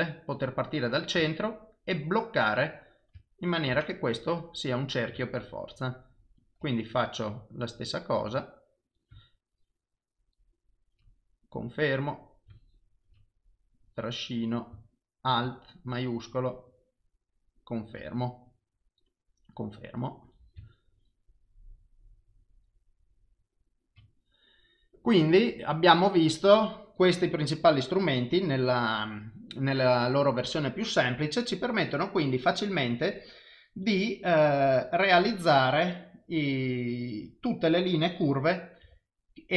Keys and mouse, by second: 4.9 click, 8.8 click, 12.3 click, 13.8 click, 20.2 click, 33.8 click, 34.8 click.